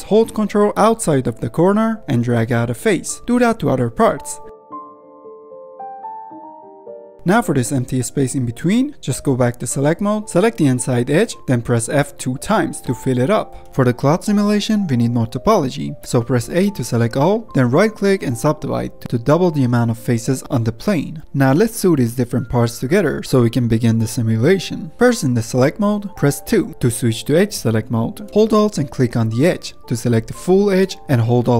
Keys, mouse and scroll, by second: 0.0-8.4 drag, 8.8 ctrl+z, 9.6 click, 11.1 2, 11.4 click, 11.8 f, 12.2 f, 12.7 scroll down 1, 13.3 1, 13.5 click, 13.7 middle click, 13.9 scroll down 1, 14.1 Tab, 14.6-15.8 middle drag, 15.8-16.2 scroll up 3, 16.2-16.5 middle drag, 16.5 Tab, 17.3 a, 19.1-19.7 right drag, 19.7-24.2 middle drag, 24.2-24.9 scroll up 1, 24.9 2, 30.0 alt+click, 30.3 scroll down 1, 30.6-31.5 middle drag.